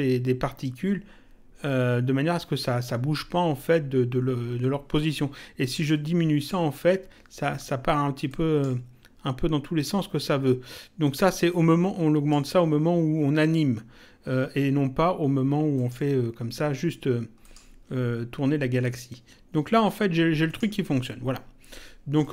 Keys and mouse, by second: 5.8 click, 8.2 click, 10.6 click, 15.7 click, 17.4 click, 20.4 click, 22.2 click.